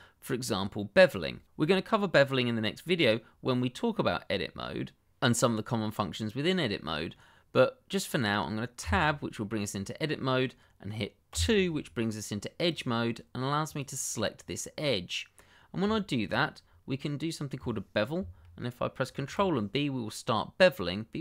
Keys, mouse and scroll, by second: 8.8 Tab, 11.3 2, 12.6 click, 14.3 scroll up 1, 14.7 middle click, 15.6-15.9 scroll down 1, 15.9 shift+middle click, 19.0 ctrl+b.